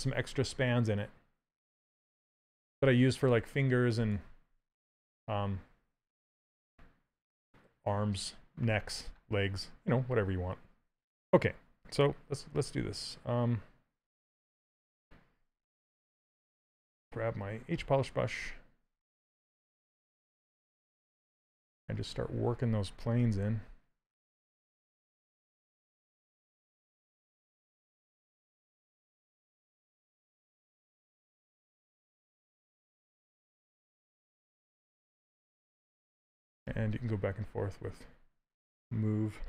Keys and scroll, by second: 2.5 ctrl+z, 23.4 shift+f.